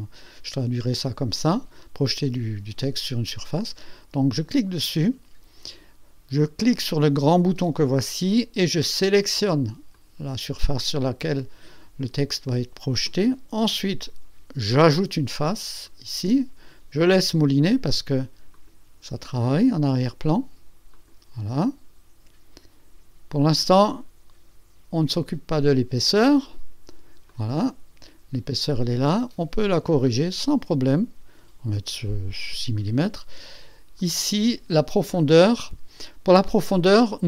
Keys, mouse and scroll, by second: 4.3 click, 7.3 click, 9.0 click, 9.9-12.0 drag, 14.7 click, 15.8 click, 18.5 click, 20.9 click, 23.5 click, 26.0 click, 27.3-28.7 drag, 29.5-30.3 scroll down 2, 31.3 scroll down 1, 34.0 click, 34.5 click.